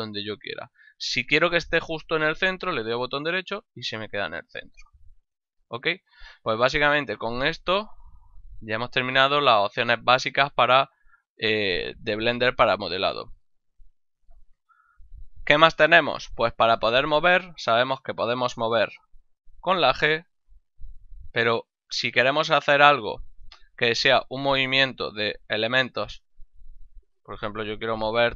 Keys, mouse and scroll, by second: 3.3 right click, 5.7 middle click, 7.7 middle click, 8.1 middle click, 9.0 middle click, 9.9 middle click, 10.9 middle click, 11.7 middle click, 17.1 right click, 19.3 g, 20.3 right click, 20.8 g, 21.3 right click, 21.7 right click, 23.9 right click, 24.3 middle click, 27.1 right click.